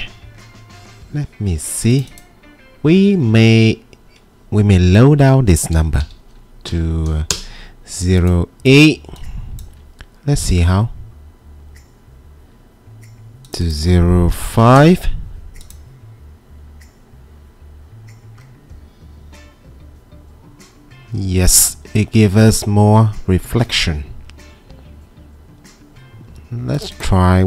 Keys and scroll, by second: 6.4-7.1 typing, 7.3 Return, 8.2 typing, 9.9 typing, 11.9 typing, 14.3-15.0 typing, 19.6-20.3 typing.